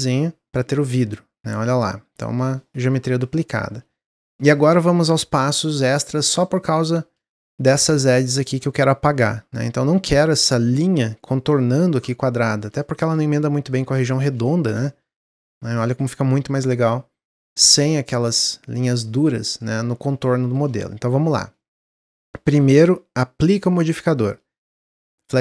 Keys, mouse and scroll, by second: 1.4 ctrl+z, 2.1 click, 2.9-3.6 middle drag, 3.6-4.0 scroll up 2, 4.0-4.3 shift+middle drag, 4.3 scroll down 1, 6.8-7.2 scroll up 1, 7.2-10.2 shift+middle drag, 12.2-12.6 scroll down 2, 12.8-13.1 shift+middle drag, 13.1-13.6 scroll down 1, 14.0 click, 14.4 shift+middle drag, 14.6-15.5 shift+scroll up 8, 19.8 scroll down 1, 20.2-20.6 shift+middle drag, 20.6-21.2 shift+scroll up 2, 21.2 click, 21.7-24.2 shift+middle drag, 24.2-25.4 drag.